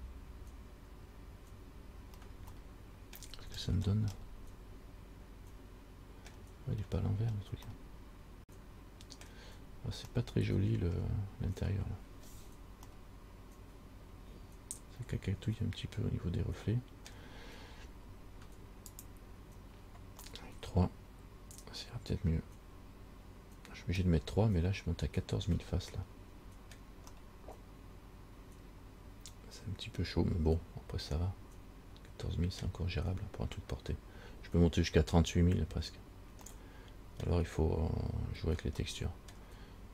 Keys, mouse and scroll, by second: 0.2-0.8 scroll up 1, 0.8 scroll up 1, 2.0-2.3 scroll up 1, 2.8 shift+middle click, 3.6-4.3 scroll up 5, 4.4 middle click, 6.7-7.6 scroll down 6, 7.9 middle click, 9.7 scroll up 2, 10.3 middle click, 12.5-12.9 scroll down 2, 13.1 middle click, 19.1 click, 20.5 middle click, 26.2 middle click, 27.3 middle click, 36.7 middle click, 39.0 middle click.